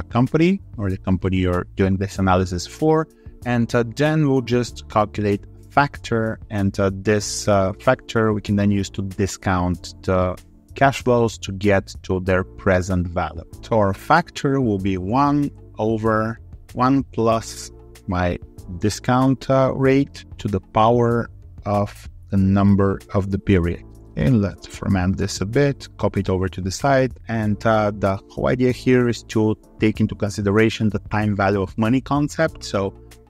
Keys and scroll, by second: 24.4 alt+2, 25.8 ctrl+r.